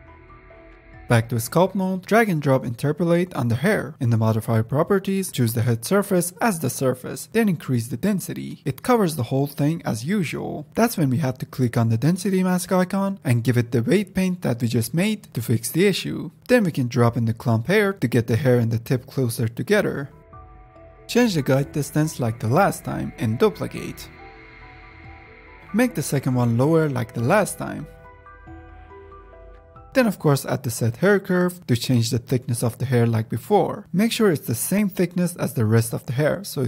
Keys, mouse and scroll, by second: 0.1 F10, 0.2 scroll down 1, 0.3 click, 0.4 middle click, 1.8-2.7 drag, 4.3-6.5 drag, 6.9-8.1 drag, 8.1 KP_0, 8.2 KP_0, 8.6 middle click, 9.0-10.1 scroll up 3, 10.1-11.7 scroll up 1, 11.7-15.2 drag, 16.4 scroll up 2, 16.7-17.3 drag, 17.9-18.9 drag, 18.9 ctrl+z, 18.9 drag, 19.2 middle click, 19.4-21.0 drag, 21.0 scroll down 4, 21.4-23.2 drag, 23.2-24.5 scroll down 1, 24.5-25.6 drag, 25.7-26.5 scroll down 6, 26.5-28.3 drag, 28.9 click, 29.5 middle click, 29.9-30.3 drag, 31.5-32.1 drag, 32.3-32.8 drag, 33.4 click, 34.2 KP_0, 35.4 click, 35.6 middle click, 36.3 click, 36.5-36.6 scroll up 2.